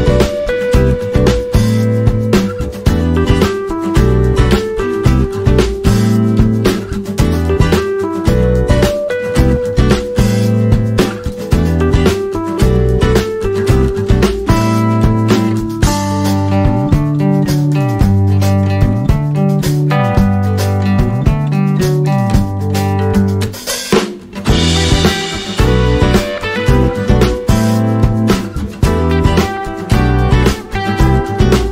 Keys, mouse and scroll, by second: 17.8 right click, 20.0 click, 24.4 right click, 26.4 click, 30.0 right click.